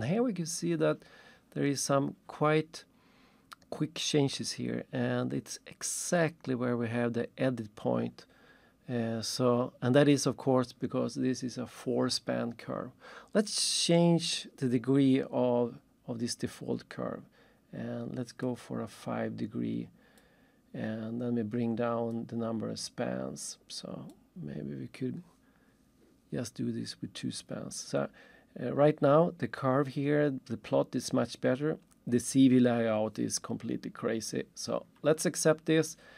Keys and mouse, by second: 0.0 click, 18.5 click, 20.2 click, 22.1 click, 24.1 click.